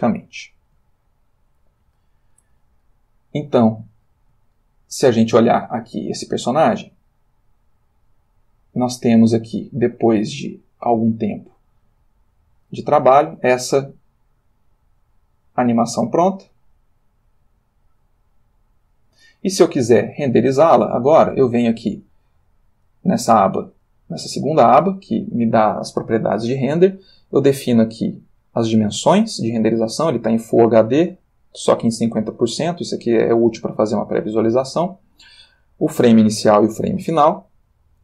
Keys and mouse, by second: 1.2-2.7 ctrl+drag, 4.6-5.6 shift+drag, 7.9 click, 10.3 click, 11.5 click, 13.5-19.6 drag, 22.7 click, 33.1-35.5 drag.